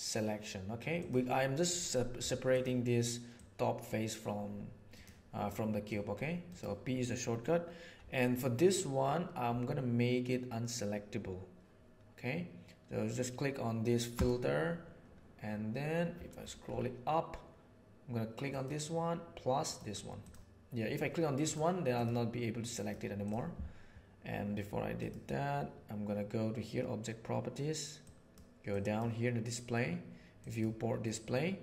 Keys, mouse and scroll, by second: 2.1 Tab, 3.3-5.0 drag, 5.9 click, 14.0-20.0 middle drag, 21.4 middle click, 22.7 middle click, 24.8 click, 27.9-28.3 drag, 28.6 drag, 30.2 click, 30.9 middle click.